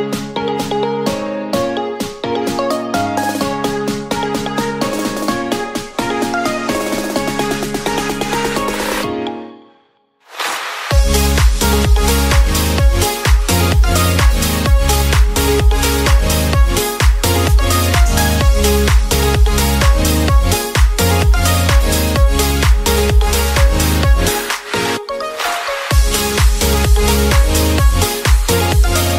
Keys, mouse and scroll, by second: 0.2-2.3 drag, 3.3 click, 4.6 click, 6.1 r, 6.2 r, 8.3 shift+d, 9.4 alt+r, 10.2 drag, 11.7 drag, 13.1 shift+d, 14.0 drag, 15.4 r, 15.5 r, 18.4 click, 19.9 click, 20.1 click, 26.4-28.8 shift+middle drag.